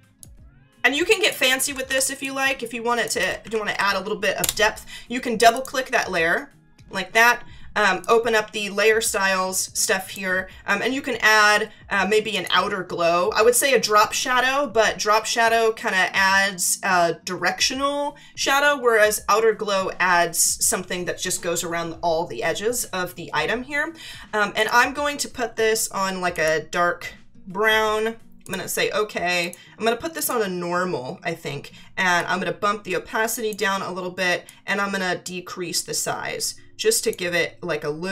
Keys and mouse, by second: 0.2 click, 1.4 Left, 2.2 click, 3.2 Right, 4.4 Return, 5.4 click, 8.0 click, 12.3 click, 24.6 click, 26.3 click, 28.4 click, 32.1 click, 34.5 click.